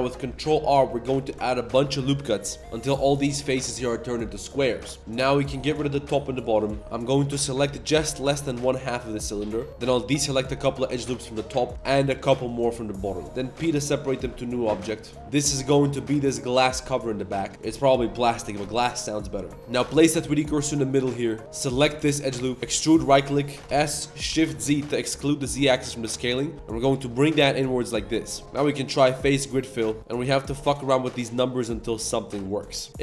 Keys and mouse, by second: 3.2-3.7 middle drag, 4.3 middle drag, 4.9 middle click, 5.0 3, 5.5 shift+click, 5.7 x, 6.6 click, 6.8 typing, 7.9 1, 8.8 3, 9.1-9.4 drag, 9.5 z, 10.0 alt+shift+click, 10.5 alt+shift+click, 11.7 alt+shift+click, 13.1 alt+shift+click, 13.5 p, 14.5 Tab, 14.7 click, 14.9 Tab, 15.2 Tab, 17.3 g, 17.5 Tab, 17.5 z, 17.7 click, 19.6 ctrl+z, 19.6 Tab, 19.6 s, 20.0 click, 21.2 Tab, 21.4 z, 21.6 alt+click, 22.0 alt+click, 22.6 e, 23.2 middle click, 23.6 s, 28.4 ctrl+s, 28.4 click, 29.8 middle click, 30.0-31.1 drag, 31.4 middle click, 32.3 shift+middle click, 32.6 middle click.